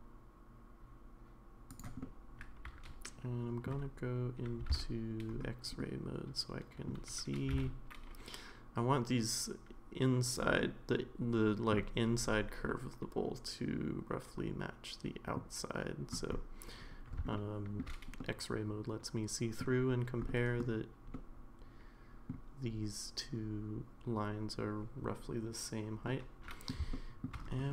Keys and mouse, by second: 2.0-3.6 middle drag, 4.7 alt+z, 5.8-6.9 middle drag, 7.4 g, 10.7-11.7 middle drag, 12.7-15.4 middle drag, 17.3 shift+middle click, 18.2-19.6 middle drag, 20.3 middle click, 21.1-22.3 middle drag, 26.1 middle click, 26.9 shift+middle click.